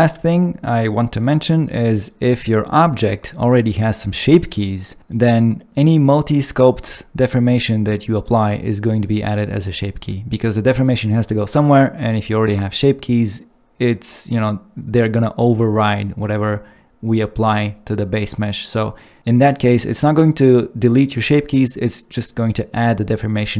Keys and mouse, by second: 1.5 click, 5.0 click, 11.6 middle click.